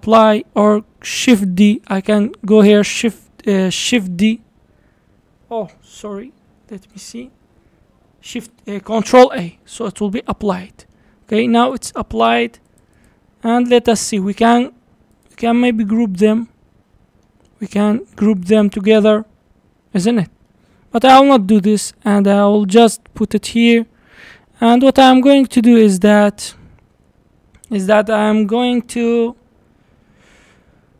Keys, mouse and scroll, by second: 3.1 shift+s, 4.0 shift+d, 5.9-8.9 drag, 9.7 ctrl+a, 10.4 scroll down 2, 10.6-11.2 middle drag, 11.2 scroll up 4, 11.7 click, 12.0-12.7 middle drag, 12.7 click, 13.0 click, 14.1 click, 15.2 shift+click, 15.9-18.9 middle drag, 20.5-21.5 middle drag, 21.5 g, 24.0-24.3 scroll down 2, 24.3-25.0 middle drag, 25.0-28.0 scroll up 1, 30.7-30.9 drag.